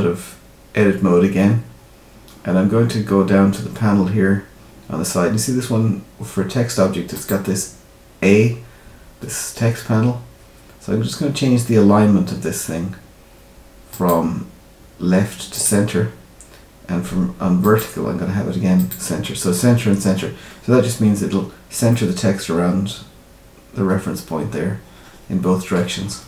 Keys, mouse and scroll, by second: 7.1 click, 9.9-13.8 scroll down 5, 13.8 click, 17.6 click, 21.8 middle click, 26.0-26.2 scroll down 2.